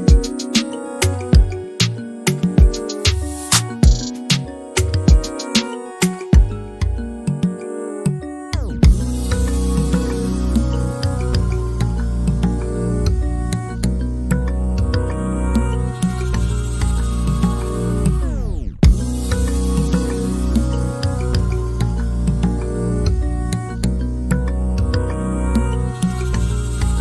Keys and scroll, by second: 23.9 r.